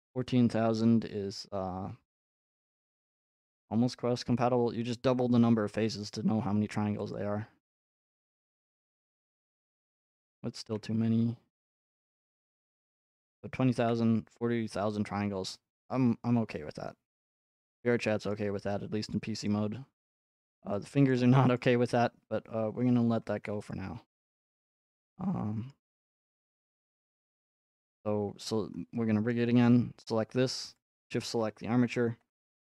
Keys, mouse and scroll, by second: 0.1-1.8 middle drag, 2.9 r, 7.1-9.2 drag, 10.6 r, 12.0 click, 13.8 Tab, 15.4 middle click, 15.6 middle click, 16.5 Tab, 17.5 Tab, 18.3-18.7 scroll up 2, 20.5 scroll up 2, 21.1 shift+middle click, 21.2 shift+middle click, 21.6 click, 23.3 ctrl+Tab, 23.7 click, 24.0 r, 24.7 middle click, 25.0 click, 25.3 r, 25.7 middle click, 25.9 click, 27.0 ctrl+Tab, 27.6 click, 28.8-29.3 scroll, 30.9 shift+click.